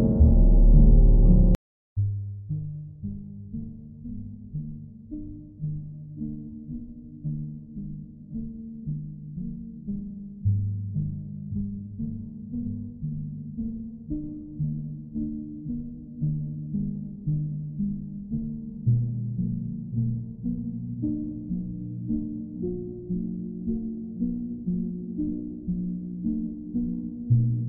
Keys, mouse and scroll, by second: 2.7 click, 5.2 click, 6.0 click, 7.3 click, 8.0 click, 8.5 click, 9.0 alt+click, 9.2 alt+click, 9.8 click, 11.5 click, 12.0 click, 14.3 click, 15.0 click, 15.9 click, 18.8 click, 19.7 click, 23.1 click, 23.9 click, 25.1 click, 25.7 click, 26.2 shift+click, 26.7 alt+click, 27.5 alt+click.